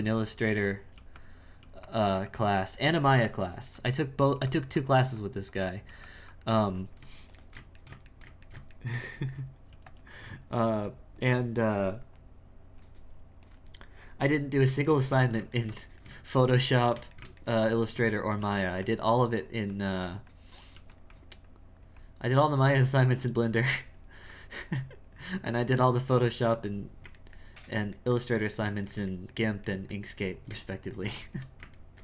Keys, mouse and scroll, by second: 0.9 f, 1.6 f, 2.2 click, 3.8 click, 4.8-5.9 drag, 6.3-7.4 drag, 7.4-9.7 shift+middle drag, 10.1-14.9 drag, 14.9-18.4 ctrl+middle drag, 18.9-20.8 drag, 21.1-27.3 drag, 27.3-32.0 ctrl+middle drag.